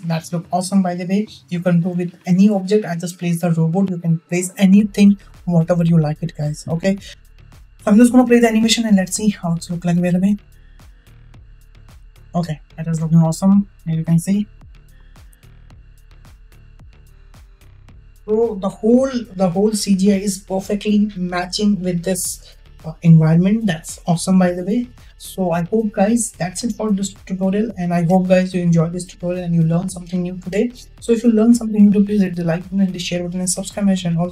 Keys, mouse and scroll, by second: 10.1 space, 12.3 space, 14.4 click, 15.6 space, 17.6 space.